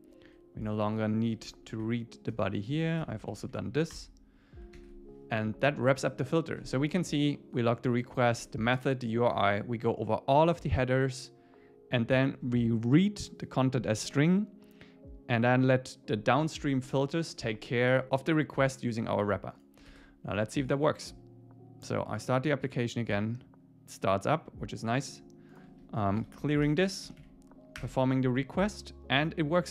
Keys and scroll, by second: 1.3 shift+super+Left, 1.7 shift+Up, 2.7 Down, 3.3 shift+Up, 4.8 super+s, 26.7 Return, 27.1 Up, 27.8 Return.